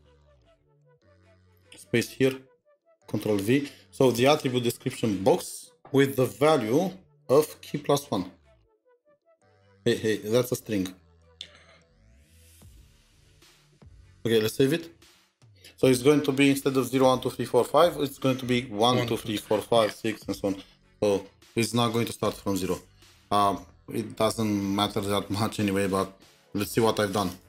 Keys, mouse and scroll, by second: 0.9 typing, 2.3-3.1 typing, 4.2 typing, 7.0-7.5 typing, 9.2-13.7 typing, 26.1 typing, 26.2-27.4 scroll down 1.